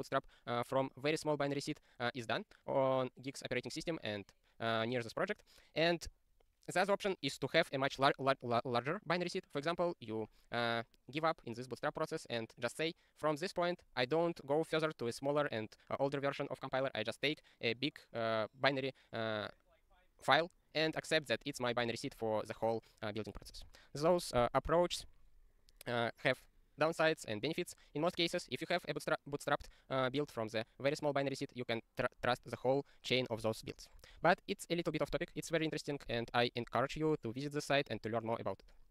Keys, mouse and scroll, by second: 36.4 scroll down 1, 37.2 scroll down 1, 37.8 scroll down 1, 38.6-38.9 scroll down 1.